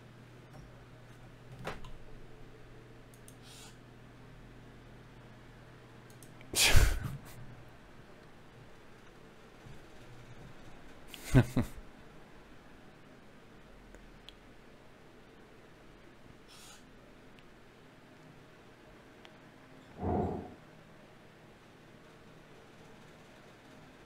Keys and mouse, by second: 0.0 click, 0.8 ctrl+Tab, 1.8-3.0 drag, 3.0 f, 4.0 click, 4.4 f, 4.8 f, 5.6 f, 7.4 ctrl+Tab, 11.8 g, 13.0 g, 14.0 g, 14.8 g, 16.0 g, 18.7 g, 20.5 Tab.